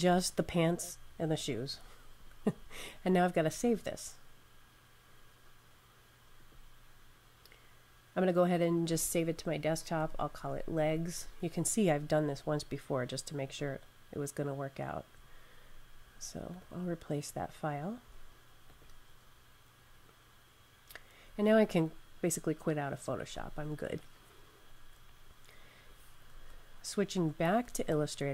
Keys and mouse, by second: 3.3 click, 6.2 click, 9.6-10.9 typing, 13.3 click, 16.4 click, 23.3 super+q, 26.3 super+Tab, 27.1 super+Tab.